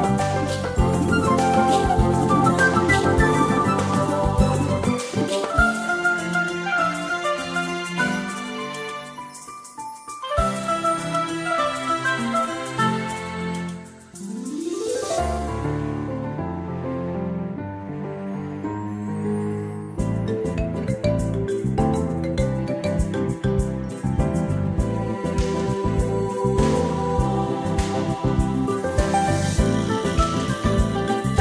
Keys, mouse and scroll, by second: 0.8 BackSpace, 3.8 click, 8.5 click, 10.8 BackSpace, 11.3 0, 13.7 click, 15.8 BackSpace, 19.1 click, 28.2 click, 29.0 shift+click, 29.6 shift+click, 30.0 shift+click.